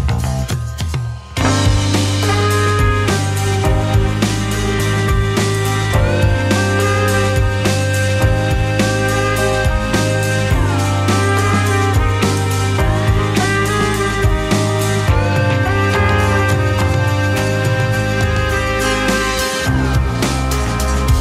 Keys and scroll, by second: 1.5 z, 3.3 Delete, 14.3 2.